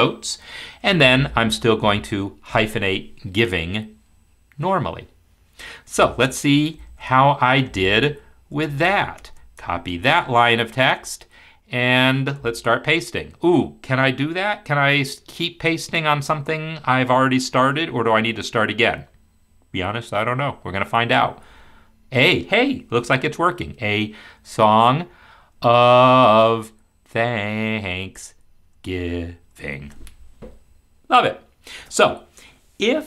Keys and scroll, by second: 21.5 ctrl+v, 24.4 ctrl+v, 25.5 ctrl+v, 26.2 ctrl+v, 27.1 ctrl+v, 27.9 ctrl+v, 28.8 ctrl+v, 29.5 ctrl+v.